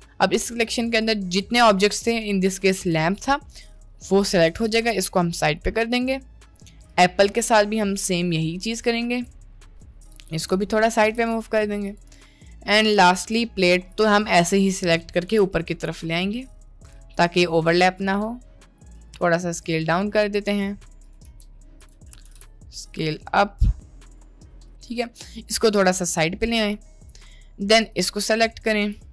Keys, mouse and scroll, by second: 3.5 middle click, 4.5 g, 6.9-9.3 drag, 9.6 middle click, 10.2 g, 11.1 g, 13.9 click, 14.7 middle click, 15.4 g, 19.0 s, 21.3 s, 22.5 g, 24.8 middle click, 25.8 g, 27.5 middle click, 28.0-29.0 drag.